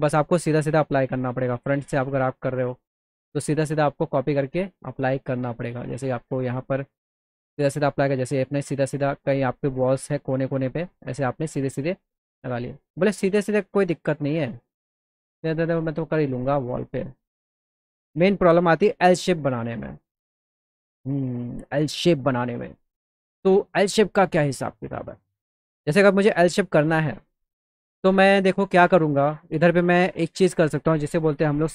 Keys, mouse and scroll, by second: 1.8 z, 2.3 right click, 2.8 click, 4.3 click, 6.1 click, 7.8-10.4 shift+drag, 14.0 click, 14.6 click, 16.5 click, 16.5 right click, 19.0 z, 19.5 alt+click, 19.5 alt+right click, 20.0 middle click, 20.5 middle click, 21.0 middle click, 21.7 middle click, 22.2 alt+middle click, 23.0 middle click, 23.7 middle click, 24.1-25.8 alt+middle drag, 29.0 click.